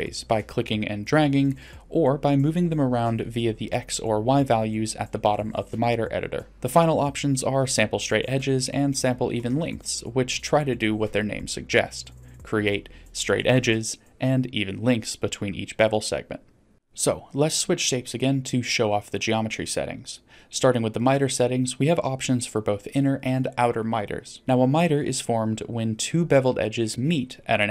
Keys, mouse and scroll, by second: 0.2 click, 1.3 click, 2.1 click, 3.0-5.2 drag, 6.1 click, 6.9 click, 10.4 click, 16.5 click, 19.1 click, 23.2 middle click, 26.7-27.4 middle drag.